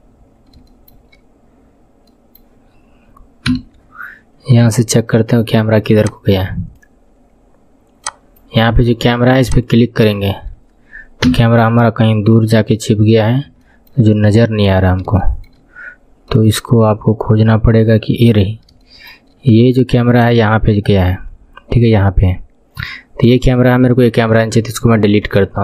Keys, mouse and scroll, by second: 0.6 shift+middle click, 1.5 scroll down 5, 2.1-4.6 middle drag, 4.6 n, 6.4-9.6 drag, 11.2 KP_1, 11.5-12.6 scroll down 13, 12.6-13.6 scroll up 11, 13.6 shift+middle click, 14.2-14.8 scroll up 8, 15.2 shift+middle click, 15.7 scroll down 6, 16.2-20.1 middle drag, 20.1 click, 24.6 Delete.